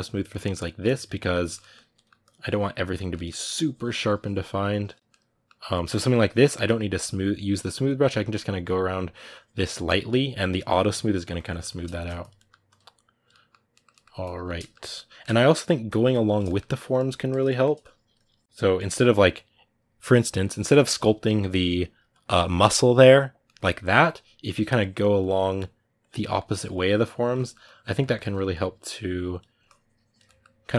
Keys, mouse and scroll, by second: 0.2 middle click, 0.6 click, 0.9-2.0 ctrl+middle drag, 2.0 click, 2.7 ctrl+middle click, 3.2-4.8 drag, 4.8-6.7 middle drag, 6.7-11.2 drag, 11.2 ctrl+middle click, 12.0 click, 12.1 middle click, 12.4 click, 13.1 middle click, 14.0 click, 14.4-15.6 shift+middle drag, 15.6 click, 16.2 shift+middle click, 16.5 click, 16.7 middle click, 17.0 click, 17.2 shift+middle click, 17.6 click, 18.3 middle click, 18.4 click, 18.5-20.4 middle drag, 20.4-23.2 drag, 23.2 middle click, 24.0 ctrl+z, 24.6-26.1 drag, 26.1 ctrl+middle click, 26.4 click, 27.1 ctrl+middle click, 27.4 click, 27.7 ctrl+middle click, 28.3-30.0 drag, 30.0-30.7 middle drag.